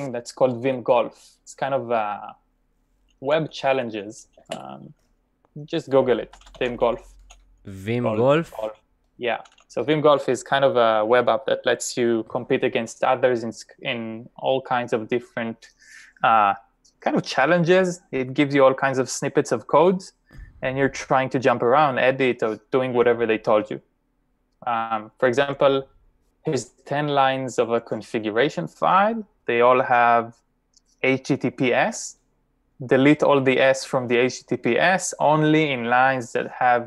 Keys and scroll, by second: 3.1-3.5 typing, 6.0-6.8 typing, 8.2-10.8 typing.